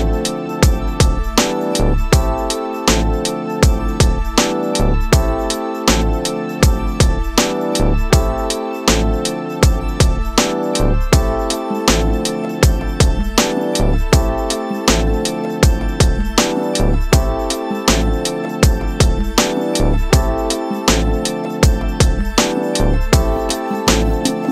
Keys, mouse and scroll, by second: 0.7-2.0 drag, 2.0-2.5 middle drag, 2.5-3.1 scroll up 2, 3.1-3.9 shift+middle drag, 3.9 click, 5.5 click, 7.1-8.3 drag, 9.2-10.6 drag, 10.6 KP_0, 12.7 click, 12.9-14.5 drag, 14.5 e, 18.4 scroll down 2, 20.4-23.1 drag, 23.1-24.5 shift+middle drag.